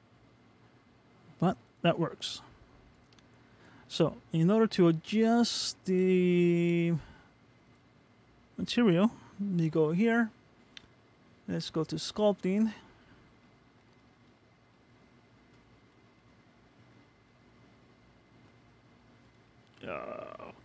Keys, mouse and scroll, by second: 4.6 click, 5.1-5.8 scroll up 2, 5.8 middle click, 7.7 click.